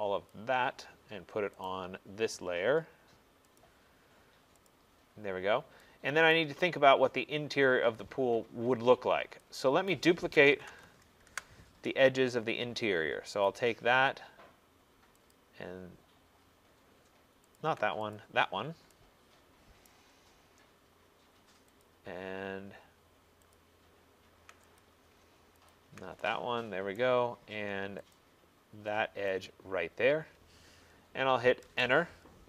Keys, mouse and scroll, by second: 0.4 click, 1.7 right click, 3.6 click, 4.8 click, 5.1-6.4 scroll, 6.4 right click, 6.8 middle click, 7.0 middle click, 9.9 right click, 10.4-11.4 typing, 11.3 Return, 13.5 click, 15.3 click, 16.6 middle click, 17.7 ctrl+click, 18.2 click, 18.6 middle click, 19.9 middle click, 19.9 right click, 20.2 middle click, 20.6 middle click, 21.9 middle click, 21.9 click, 23.6 ctrl+click, 24.8 click, 25.7 ctrl+click, 27.1 right click, 28.2 click, 29.5 click, 31.7 Return.